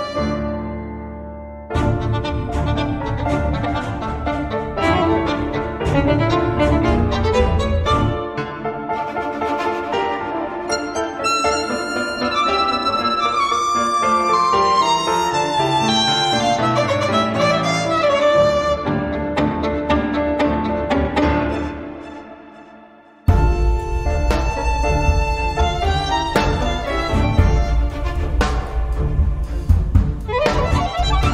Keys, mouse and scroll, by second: 0.1-1.7 drag, 2.2-3.9 drag, 4.5 click, 5.3-8.0 drag, 8.2-8.7 scroll down 1, 8.8-9.2 scroll up 1, 9.3-13.3 drag, 13.6 0, 14.3-14.7 scroll down 2, 14.9-15.3 scroll up 2, 15.5 click, 15.9 space, 17.0 click, 17.7 space, 19.2 click, 19.5 space, 20.2 click, 20.8 space, 22.0 click, 22.5 space, 22.9 click, 23.6-24.0 scroll down 1, 24.1-25.3 drag, 25.3-25.7 scroll up 2, 27.5-28.5 drag, 29.1 click, 29.9 click, 30.8 click.